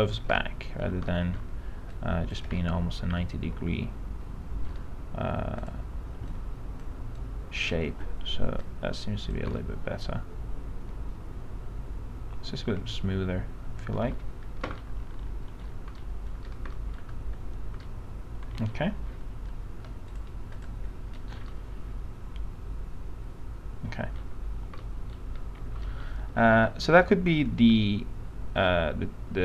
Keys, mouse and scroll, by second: 0.7 alt+middle click, 1.2 middle click, 2.1 click, 2.7-4.9 alt+middle drag, 5.8 click, 7.4 ctrl+click, 8.8 click, 10.1-14.9 alt+middle drag, 15.0 alt+middle click, 16.2 middle click, 16.5-16.9 scroll down 1, 16.9 middle click, 17.3-17.9 scroll up 1, 17.9-19.3 alt+middle drag, 20.8 click, 21.3 middle click, 21.5 scroll down 1, 21.7-24.3 alt+middle drag, 25.0 middle click, 25.2-25.9 scroll up 1, 26.3 alt+middle click, 27.2-28.8 alt+middle drag.